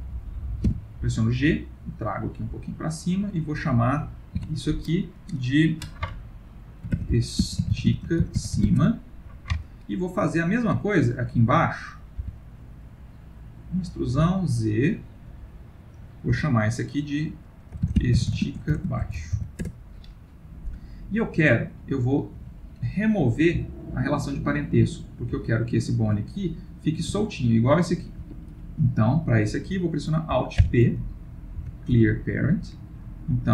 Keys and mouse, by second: 3.3 click, 4.4 F2, 10.9 shift+middle click, 11.8 click, 12.2 e, 15.5 click, 16.3 F2, 21.4 click, 22.4 g, 26.7 click, 27.0 g, 29.1 click, 30.6 alt+p, 33.4 click.